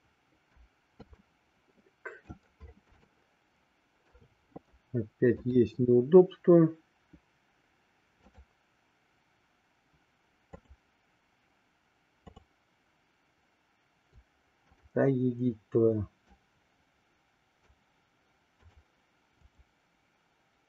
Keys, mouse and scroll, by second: 1.2-2.5 middle drag, 3.1-4.1 shift+middle drag, 5.3-6.7 shift+drag, 10.6-11.6 shift+drag, 14.7 click, 16.2-17.7 drag, 18.5 click, 19.5-20.6 drag.